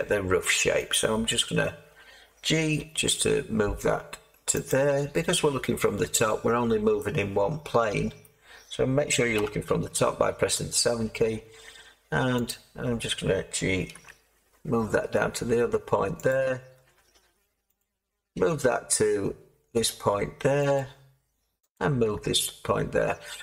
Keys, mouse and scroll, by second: 2.6 g, 8.2 middle click, 9.3 7, 12.4 click, 13.9 g, 16.2 click, 17.7 click, 18.4 g, 20.7 click, 21.7-23.4 drag, 22.0 g.